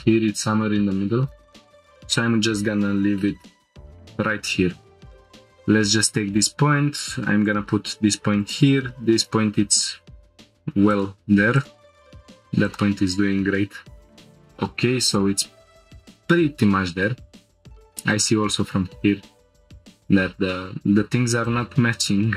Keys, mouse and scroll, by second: 1.2 click, 5.6 click, 5.7 g, 7.4 click, 8.4 click, 8.6 g, 9.2 click, 9.9 g, 10.9 click, 11.7 g, 12.6 click, 12.9 g, 14.1 shift+click, 15.1 click, 17.5 click, 19.0 ctrl+click, 19.8 g, 20.1 z, 21.4 right click, 22.2 g.